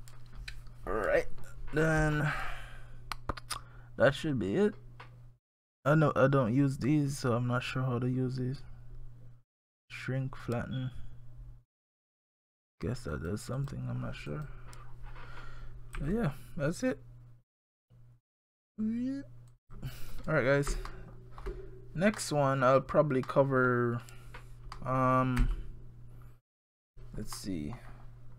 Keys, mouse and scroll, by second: 12.3 click, 13.1 click, 13.6 click, 14.3 click, 16.0 g, 20.3-20.7 scroll down 4, 20.8 shift+scroll up 1, 20.9 shift+middle click, 22.1 scroll up 1, 22.2 middle click, 23.0 scroll down 1, 23.3 middle click, 24.8 middle click, 25.4 g, 27.4 middle click, 27.9 scroll down 1.